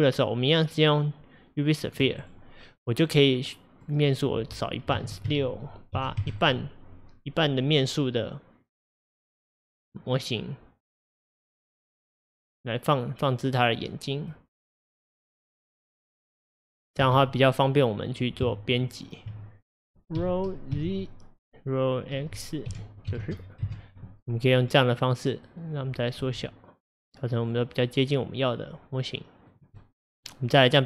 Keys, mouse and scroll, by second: 3.5-6.5 drag, 11.9-14.9 drag, 17.1 KP_1, 18.5 Tab, 20.2 r, 24.6-25.0 scroll up 2, 25.0-26.2 middle drag, 26.2 s, 29.8-30.8 middle drag.